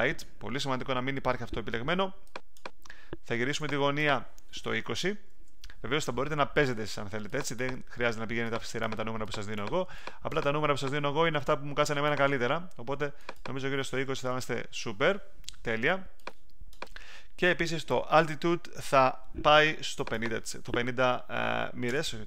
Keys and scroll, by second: 5.2 2, 13.8-14.6 typing, 21.8 5.